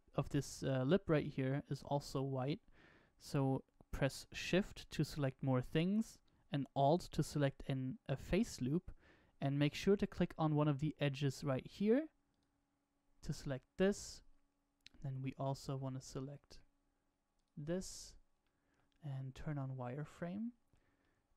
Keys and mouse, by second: 12.2 alt+shift+click, 15.1-16.1 middle drag, 18.3 middle click, 19.4 click, 20.1-21.3 middle drag.